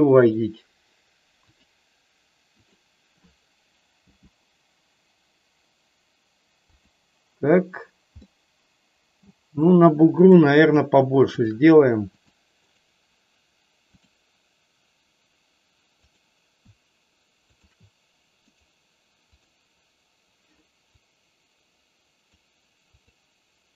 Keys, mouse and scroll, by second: 0.2-1.6 right drag, 2.5 click, 4.1 g, 6.8 click, 8.2-9.3 middle drag, 12.0 click, 12.6-14.0 right drag, 17.4 shift+click, 18.5 right click, 21.0-22.3 drag, 22.9 click.